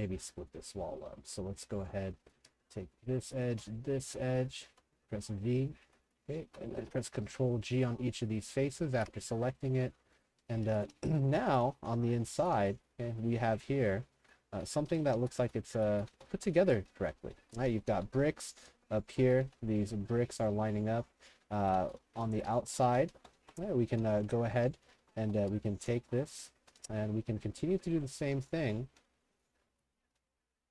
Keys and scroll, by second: 1.7 2, 3.9 w, 4.7 v, 5.9 3, 6.5 ctrl+g, 9.0 ctrl+g, 10.4-29.4 typing, 30.0 ctrl+g.